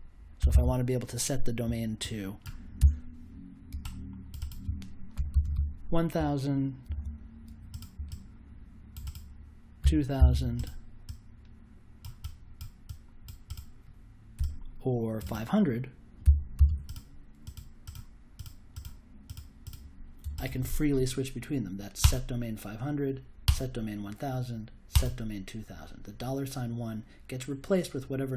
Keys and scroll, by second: 0.1-0.9 typing, 2.8 BackSpace, 4.8-5.8 typing, 6.8 super+j, 9.8 2, 10.1 0, 16.2 5, 16.5 0.